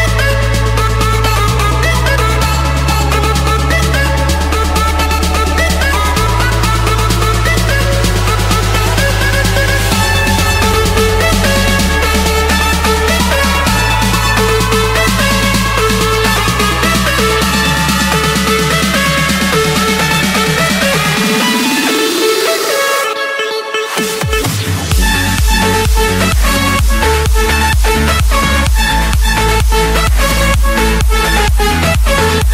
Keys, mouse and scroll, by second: 0.6 click, 0.9 Return, 4.8-5.9 drag, 6.5 click, 7.3 click, 8.0 click, 8.3-9.1 scroll, 9.9 click, 10.6-12.3 scroll, 12.8 click, 14.1 click, 14.5-15.1 scroll, 16.0 click, 16.4-17.0 scroll, 17.1-17.5 scroll up 3, 17.9 click, 18.2-18.8 scroll down 5, 19.6 click, 19.9-20.5 scroll down 5, 20.6-21.5 scroll up 7, 23.0 click, 24.1-26.7 drag, 26.8-28.0 drag, 28.0 click, 29.3-30.0 scroll, 31.3 click, 31.6 scroll, 31.7-32.1 scroll down 3, 32.1-32.5 scroll up 10.